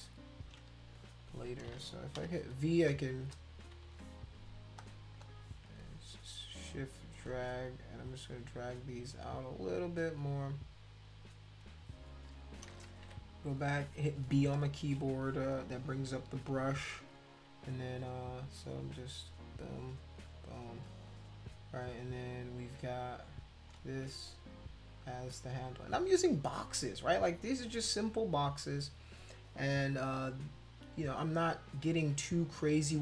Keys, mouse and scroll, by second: 2.2 v, 2.7 shift+click, 3.8 ctrl+z, 4.8 click, 5.2 shift+click, 7.9-11.6 drag, 13.0 b, 14.5 click, 18.2 click, 18.8 click, 19.7 click, 20.2 click, 23.5 click, 24.2 shift+click, 24.9 shift+click, 25.6 shift+click, 29.5 click.